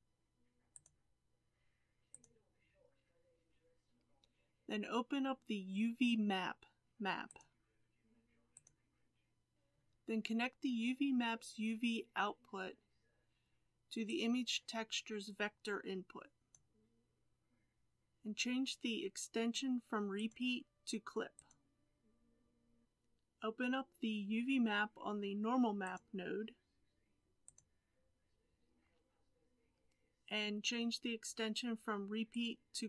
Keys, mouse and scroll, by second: 14.0-16.5 drag, 21.5-32.8 drag.